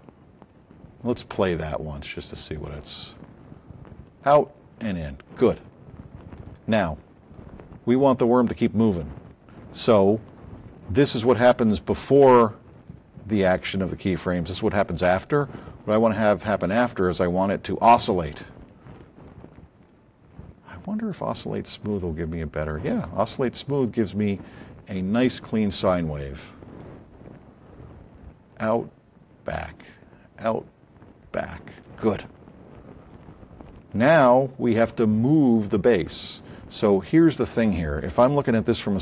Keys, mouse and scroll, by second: 6.4 click, 9.1 click, 15.2 click, 24.1-26.0 drag, 26.6 click, 31.6 click, 33.1-34.3 drag, 36.2-37.3 drag.